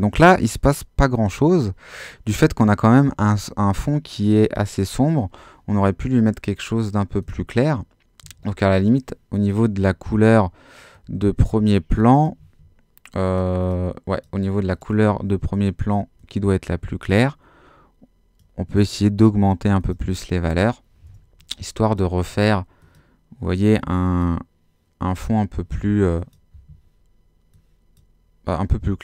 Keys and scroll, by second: 8.2 Escape, 12.4 Escape.